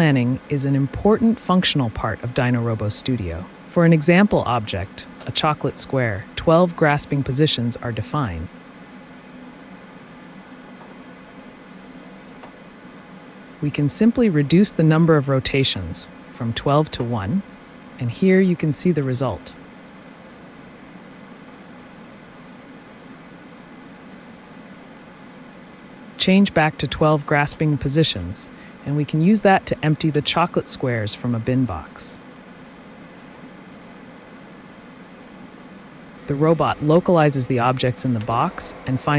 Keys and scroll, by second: 5.7 space, 14.1 1, 14.4 KP_Enter, 16.7 t, 25.9-27.5 typing.